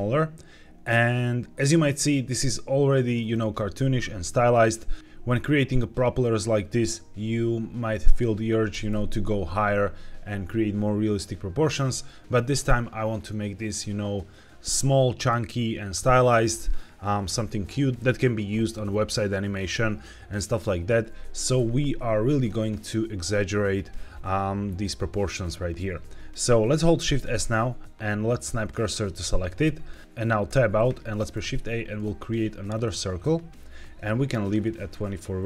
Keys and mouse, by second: 3.1 click, 8.6 g, 8.8 z, 9.8 Escape, 21.5 s, 22.3 click, 26.9 shift+s, 30.0 shift+a, 30.4 Tab, 31.2 shift+a.